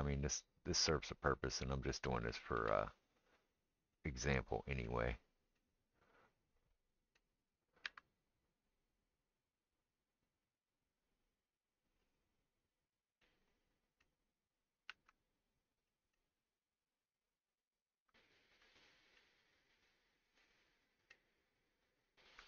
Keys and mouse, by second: 2.6 g, 7.9 r, 14.9 Tab, 18.6 click, 18.7-22.4 middle drag.